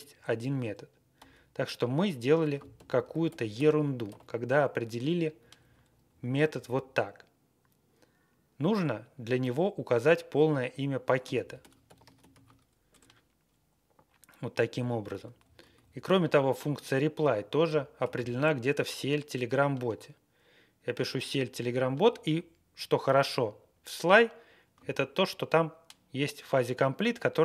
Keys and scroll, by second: 0.0 Right, 1.1 q, 2.4 ctrl+a, 2.7 ctrl+k, 3.2 alt+p, 3.5 alt+p, 4.0 alt+n, 5.3 Up, 5.5 Up, 6.0 Left, 6.6 Left, 10.9-12.8 typing, 12.9 Return, 14.7 Down, 15.1 Tab, 15.3 Down, 15.6 Tab, 15.7 Down, 16.1 Left, 16.3 Left, 16.4 Left, 16.4 Left, 16.5 Left, 16.5 Left, 17.1 Left, 17.3 Left, 17.4 Left, 17.4 Left, 17.6 Left, 17.7-18.9 typing.